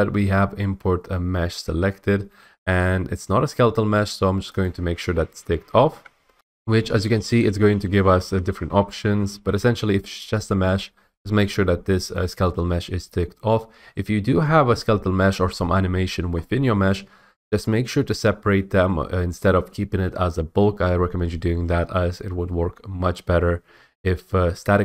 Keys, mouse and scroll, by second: 4.6 click, 6.3 F8, 6.8 F8.